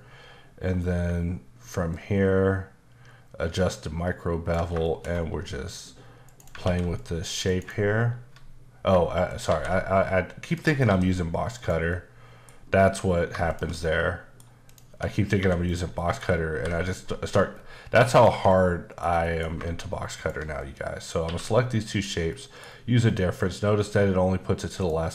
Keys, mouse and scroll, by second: 0.8 scroll up 1, 1.9 ctrl+click, 4.8 shift+middle click, 5.7 click, 6.2 right click, 6.6 alt+w, 6.9 click, 7.4 right click, 9.3 shift+right click, 9.5 shift+a, 10.5 click, 10.8 s, 11.5 click, 11.9 middle click, 13.5 shift+click, 13.8 middle click, 14.7 click, 14.9 Tab, 15.4 2, 15.6 click, 16.0 middle click, 16.5 ctrl+b, 17.0-17.5 scroll up 3, 17.5-18.1 scroll down 3, 18.1 click, 18.3 Tab, 18.5 middle click, 19.2 shift+middle click, 20.1 shift+click, 20.6 middle click, 21.2 q, 21.9 click, 22.3 middle click, 22.7-23.8 scroll up 4, 23.8-24.2 scroll up 2, 24.8 click.